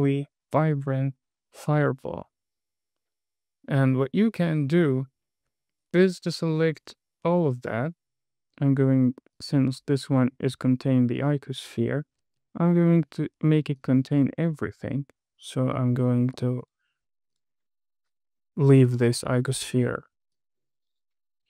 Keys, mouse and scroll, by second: 4.9 space, 6.7 click, 9.7 click, 14.1 click, 15.2 shift+click, 17.0 click, 17.7 click, 18.1-18.6 scroll down 1, 20.7 click.